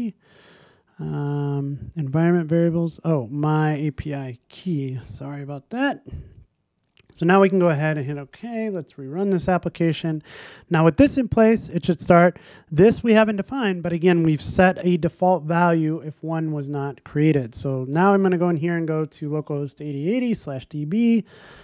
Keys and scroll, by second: 9.1 ctrl+r.